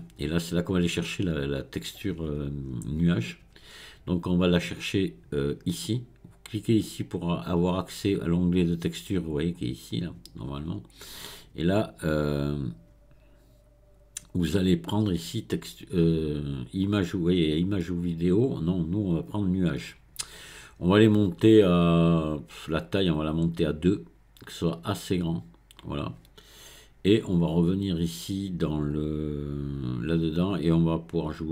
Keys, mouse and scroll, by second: 6.9-9.9 drag, 18.4-21.5 drag, 22.9-25.9 drag, 28.9 click, 31.3-31.5 drag.